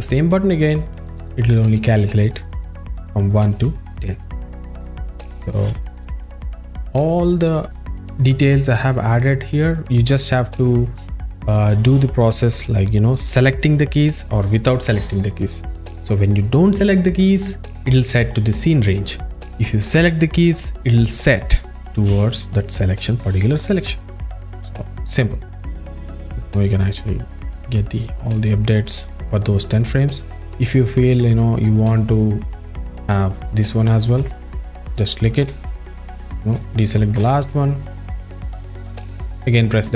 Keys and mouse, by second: 0.6 click, 4.6 click, 14.4 click, 23.6 click, 25.7 alt+middle click, 34.2 s, 35.5 a, 36.4 ctrl+click, 37.9 click, 39.7 click.